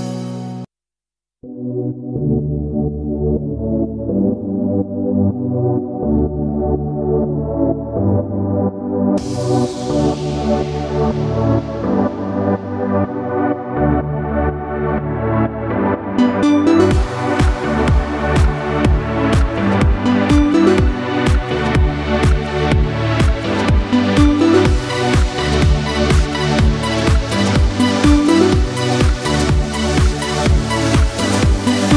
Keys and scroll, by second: 23.2 ctrl+v, 23.4 ctrl+c, 23.8 ctrl+v.